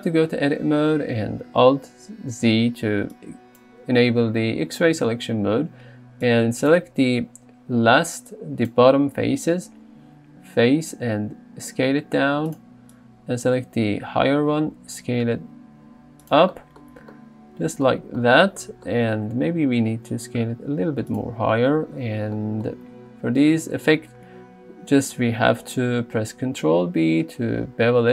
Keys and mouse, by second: 2.4 alt+z, 6.3 click, 11.2 s, 12.5 click, 14.8 s, 16.3 click, 19.5 s, 21.1 click, 26.6 ctrl+b.